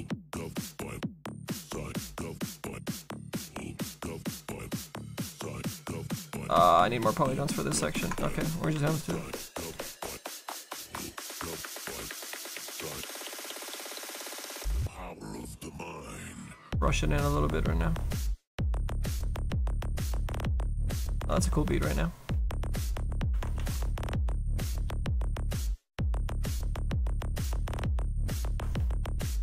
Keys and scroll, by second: 4.2 ctrl+z, 5.8 ctrl+z, 7.8 ctrl+z, 8.0 ctrl+z, 8.8 s, 18.7 ctrl+z, 19.1 s, 20.3 s, 20.7 ctrl+z, 21.3 s, 23.3 ctrl+z.